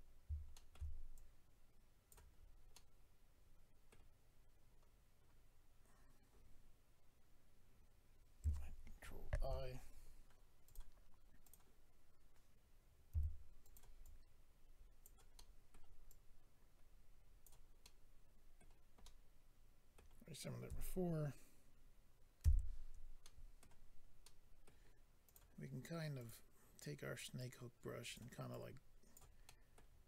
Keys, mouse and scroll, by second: 0.1 scroll up 1, 0.5 shift+middle click, 1.1 click, 2.3-2.7 scroll down 3, 2.7 middle click, 9.3 ctrl+i, 10.6 click, 11.4 click, 13.6 click, 13.6 f, 14.0 click, 15.3 middle click, 16.1 click, 17.8 middle click, 19.0 middle click, 22.4 alt+m, 25.0 middle click, 25.2 click, 26.2 click, 27.4 click, 28.5 click, 29.8 middle click.